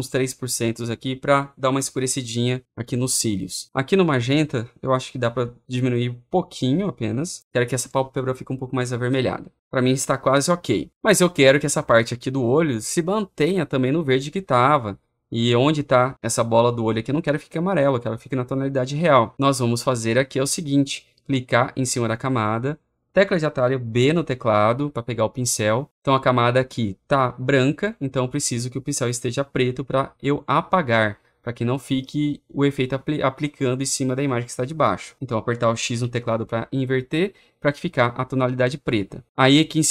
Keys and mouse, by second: 0.3-1.3 drag, 7.4-22.9 drag, 23.9 b, 35.9 x.